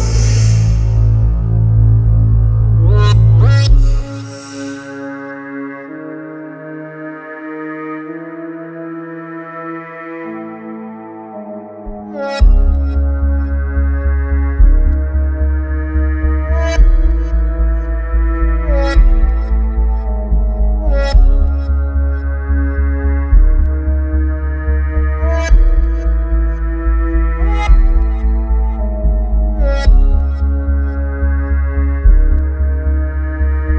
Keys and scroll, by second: 6.1 ctrl+e, 7.5 ctrl+e, 8.3 ctrl+r, 8.5 Escape, 12.6 ctrl+e, 16.6 ctrl+e, 17.5 ctrl+r, 17.8 Escape, 21.8 ctrl+e, 23.6 ctrl+e, 29.2 Escape.